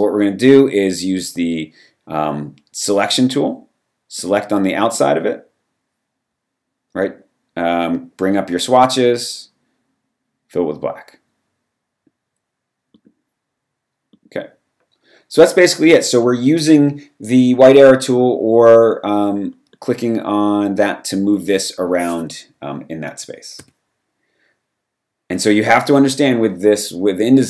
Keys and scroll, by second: 23.6 v.